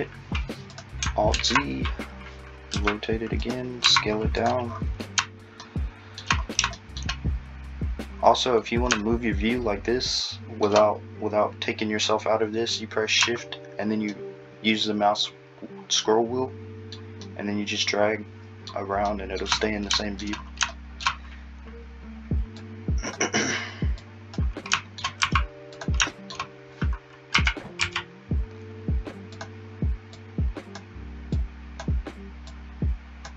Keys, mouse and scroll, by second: 1.3 alt+z, 2.7 r, 3.9 s, 22.6 click, 25.2 s, 27.4 r, 30.2 click, 31.4 click.